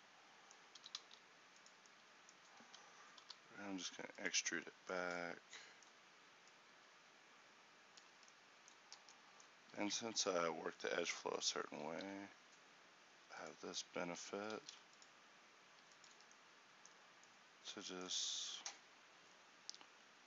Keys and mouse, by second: 0.9 s, 2.7 e, 6.2-8.2 drag, 8.2 Tab, 9.0 Tab, 9.9 ctrl+r, 12.0 alt+s, 14.7 ctrl+r, 16.2 Tab.